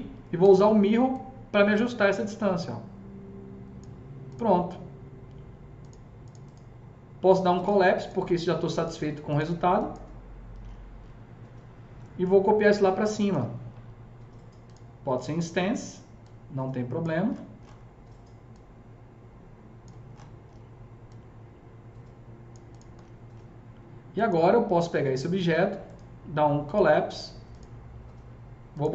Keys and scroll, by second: 0.3 s.